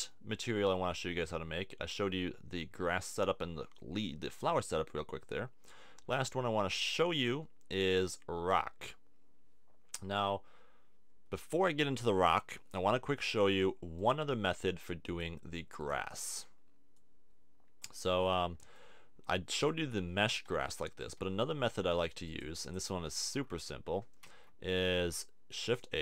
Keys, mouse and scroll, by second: 7.2 click, 14.0-15.1 drag, 16.0-17.3 drag, 19.6-21.0 drag, 20.5 KP_1, 21.0 KP_3, 24.3 shift+a.